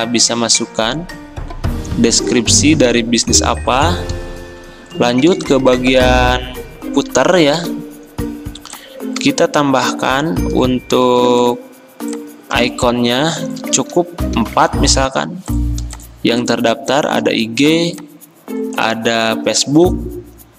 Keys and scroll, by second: 7.6 i, 11.2 v, 14.1 ctrl+d, 14.5 ctrl+d.